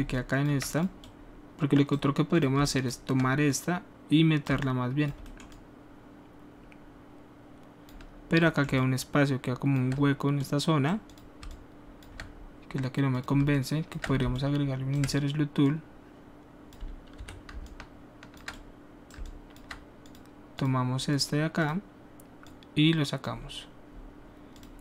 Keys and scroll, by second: 17.1 w, 19.0 alt+w.